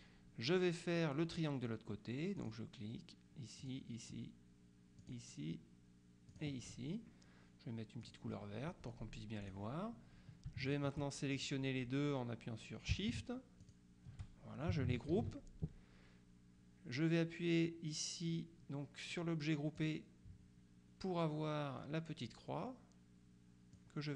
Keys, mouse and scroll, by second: 2.5 click, 3.7 click, 5.1 click, 6.4 click, 8.1 click, 9.5 click, 10.7 shift+click, 11.4 shift+click, 13.7 shift+click, 15.2 ctrl+g, 19.9 click, 23.8-24.1 drag.